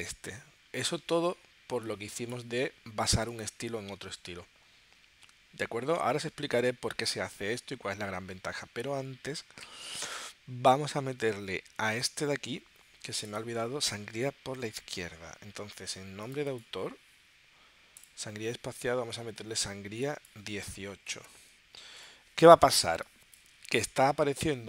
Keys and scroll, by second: 20.9-21.8 typing, 22.0 Tab.